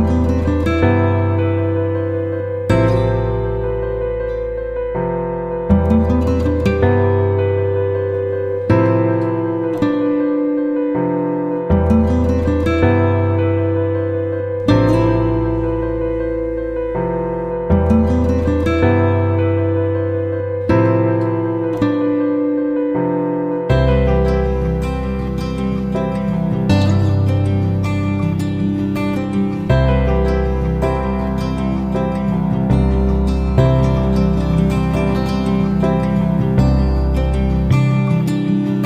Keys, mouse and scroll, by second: 0.9 F9, 1.4 click, 6.9-12.1 drag, 13.3 shift+w, 14.6 shift+click, 15.9 click, 17.0 ctrl+z, 18.0 click, 20.4 ctrl+z, 22.1 click, 23.3 shift+click, 24.8 click, 26.3 KP_0, 27.6 click, 28.4 shift+o, 29.8 click, 30.8 shift+t, 32.0 shift+t, 32.8 shift+click, 33.5 shift+click, 34.3 shift+click, 35.4-36.5 drag, 36.8 Down, 36.9 Down, 37.1 Down, 37.3 Down.